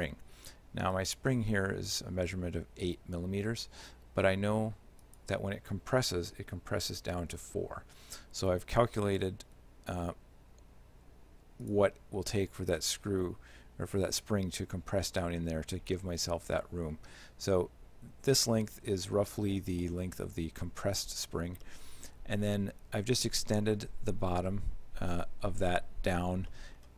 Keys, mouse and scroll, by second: 1.0 right click, 5.1 click, 9.5 g, 21.7 middle click, 24.3 z, 25.5 right click, 26.5 middle click.